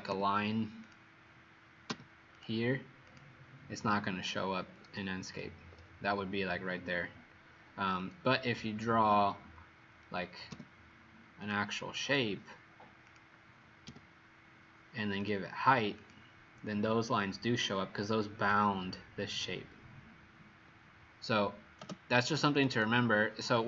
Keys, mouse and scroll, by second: 0.2 l, 0.9 click, 2.0 l, 2.5 click, 5.0 Escape, 9.1 r, 10.7 l, 11.6 click, 12.3 click, 13.0 click, 13.8 p, 15.2 click, 22.3 click, 22.5 click, 22.8 click.